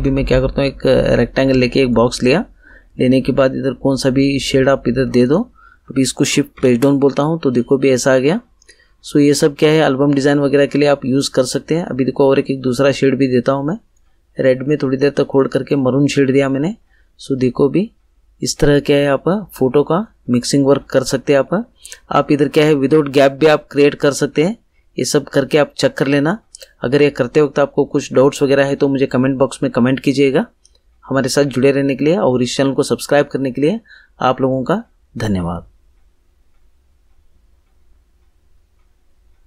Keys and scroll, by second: 6.5 shift+Page_Down.